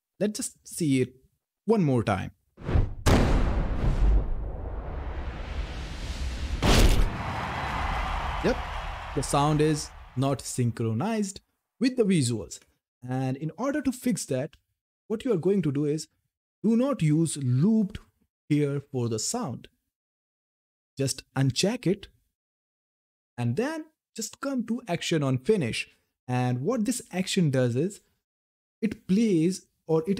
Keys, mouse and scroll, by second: 14.8 click, 21.2 click, 24.3-26.1 scroll down 1.